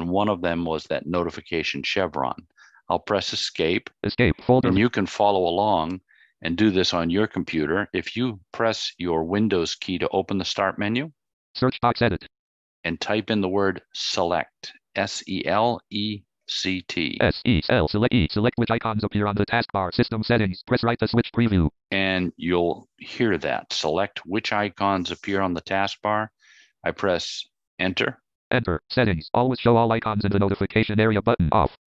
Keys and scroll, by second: 2.6 Escape, 27.0 Return.